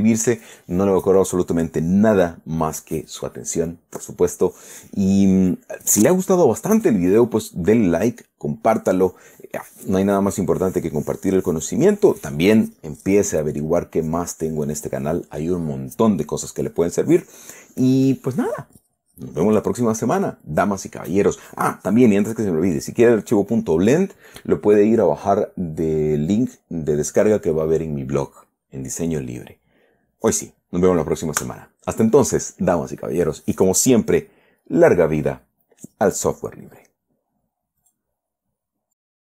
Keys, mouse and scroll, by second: 38.2 click, 39.3 click.